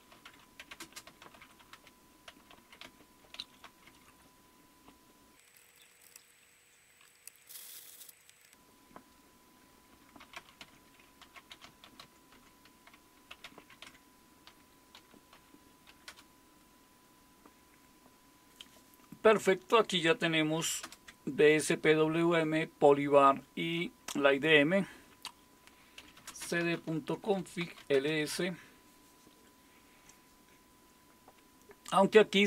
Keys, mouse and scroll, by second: 0.0-4.3 typing, 5.5 Tab, 5.5-6.6 typing, 7.3 Return, 9.7-16.1 typing, 20.8 super+Return, 25.7-28.1 typing.